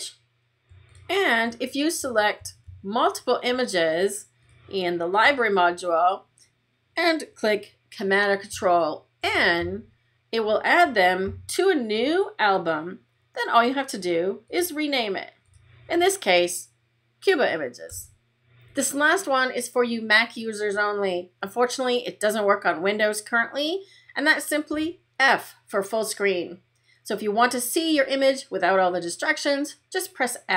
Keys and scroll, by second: 9.1 super+n, 24.6 f.